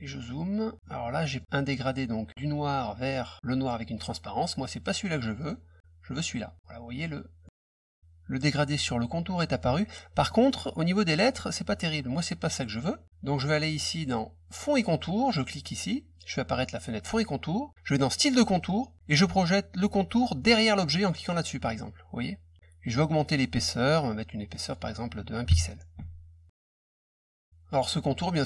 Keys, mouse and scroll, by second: 0.3 middle click, 1.0 middle click, 5.3 click, 6.2 click, 7.0 middle click, 7.4 middle click, 10.2 middle click, 10.5 middle click, 15.4 click, 18.1 click, 21.1 click, 24.5 click, 25.9 Tab, 27.9 click.